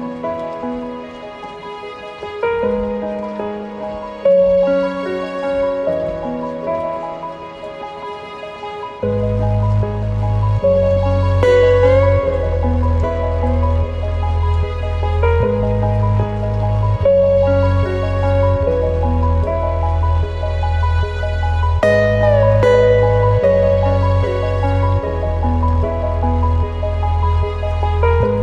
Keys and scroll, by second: 6.2 ctrl+alt+shift+b.